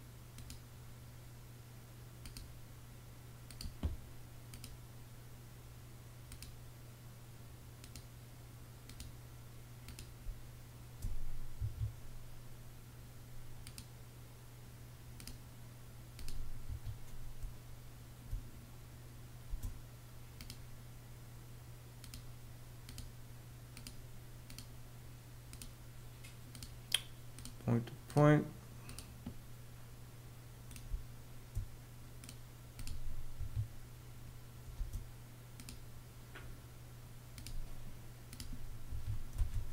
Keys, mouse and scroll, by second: 9.7 space, 11.1 Escape, 16.2 ↺, 16.9 space, 19.0 space, 30.4 space, 32.9 Escape, 34.3 space, 38.4 Escape, 38.9 space.